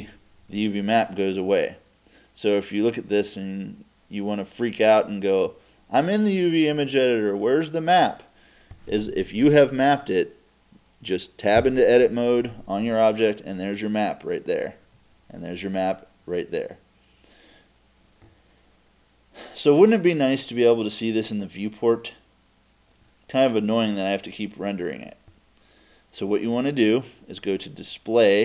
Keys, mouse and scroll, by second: 11.6 Tab.